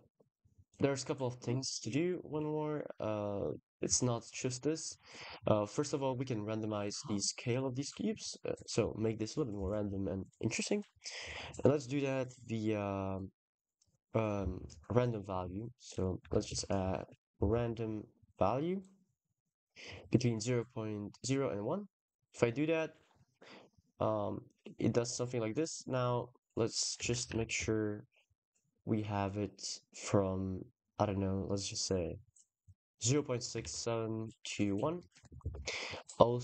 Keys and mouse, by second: 0.0 ctrl+s, 0.8 click, 2.2 ctrl+s, 2.5 click, 5.8 click, 6.6 click, 15.2 shift+a, 18.6 click, 21.5 click, 22.5 middle click, 22.9 middle click, 24.3 middle click, 26.3 shift+click, 27.1 ctrl+z, 27.7-29.3 shift+drag, 33.5 ctrl+s, 34.5 middle click, 35.0 shift+middle click, 35.2 ctrl+s.